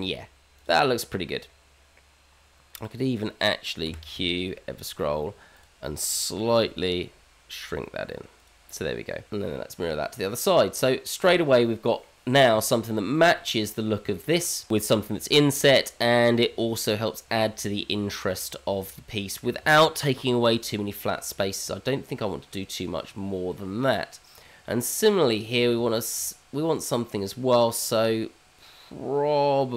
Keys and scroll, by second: 3.8 q, 6.6 s, 9.4 h, 10.2 g, 11.0 alt+x.